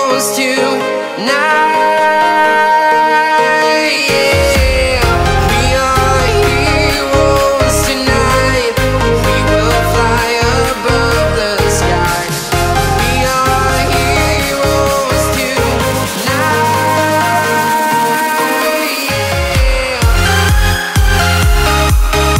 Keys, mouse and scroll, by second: 0.1 click, 1.4 click, 2.8 click, 3.4 right click, 4.8 click, 5.2-5.6 scroll up 1, 5.8-8.6 drag, 8.6-9.0 scroll down 1, 9.3-11.1 drag, 11.1 scroll down 1, 12.4 scroll up 1, 13.8 shift+Num_Lock, 13.8 scroll up 1, 14.0-17.1 shift+drag, 17.1-21.7 shift+drag, 21.7-22.3 shift+drag.